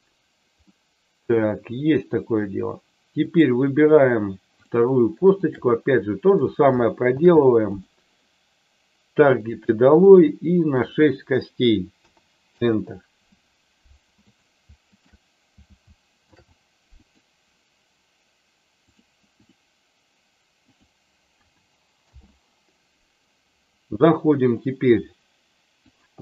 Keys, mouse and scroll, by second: 0.6 middle click, 3.2 click, 5.3 shift+click, 9.3 ctrl+shift+click, 10.6-12.7 drag, 14.2 click, 14.9 shift+click, 20.7-22.2 drag, 24.5-26.0 drag.